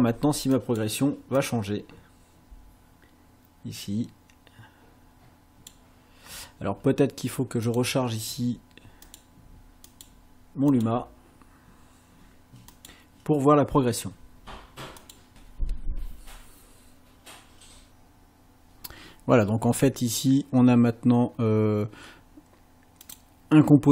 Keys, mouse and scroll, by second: 0.5 click, 1.4-5.9 drag, 7.7 click, 9.0 click, 9.9 click, 10.7 click, 12.7 click, 15.0 click, 15.3 space, 23.1 click.